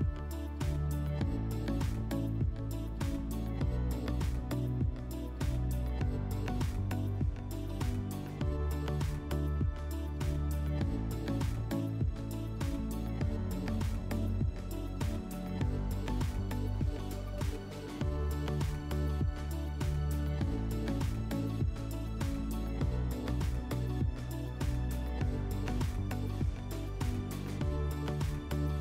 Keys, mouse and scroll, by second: 0.9 click, 1.7 click, 1.9 click, 3.2 right click, 4.2 click, 5.7 right click, 6.8 click, 9.8 w, 10.1-11.7 right drag, 12.2 click, 16.0 click, 16.1 click, 19.0 click, 20.4 click, 23.2 click, 24.1-25.2 drag, 25.8-27.8 drag.